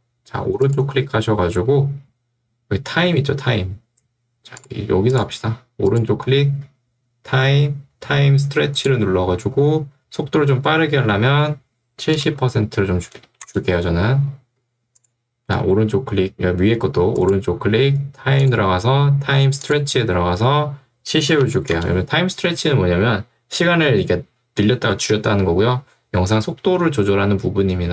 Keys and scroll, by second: 12.3 0, 13.5 Return, 21.4 0, 21.8 Return.